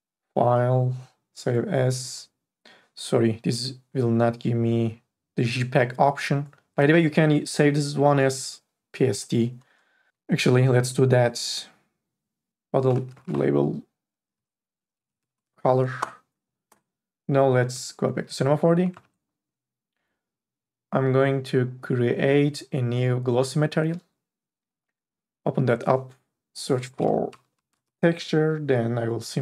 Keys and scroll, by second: 12.5-15.5 typing, 16.0 Return, 19.2 alt+Tab, 27.1-28.1 typing.